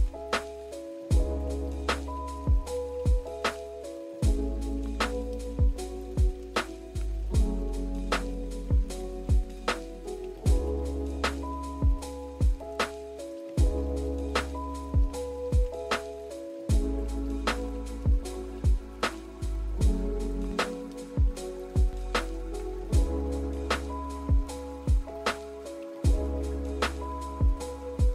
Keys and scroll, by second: 3.9 v, 10.4 z, 14.9 Delete, 17.3 z.